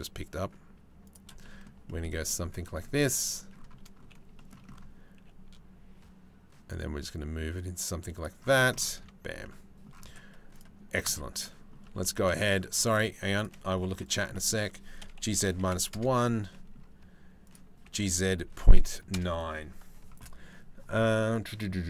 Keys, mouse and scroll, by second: 1.0 shift+middle click, 1.5 shift+middle click, 1.9 shift+middle click, 2.3 shift+click, 4.0 shift+click, 5.7 g, 9.1 Tab, 10.2 click, 11.0 click, 11.5 Tab, 11.6 click, 12.5 click, 12.8 3, 13.0 click, 13.4 z, 14.0 click, 14.8 g, 16.1 click, 17.5 g.